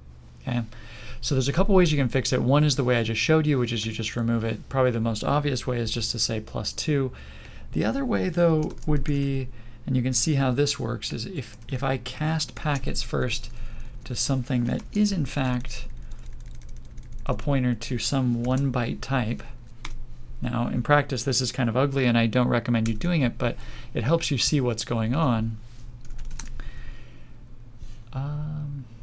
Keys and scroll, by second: 22.8 ctrl+s.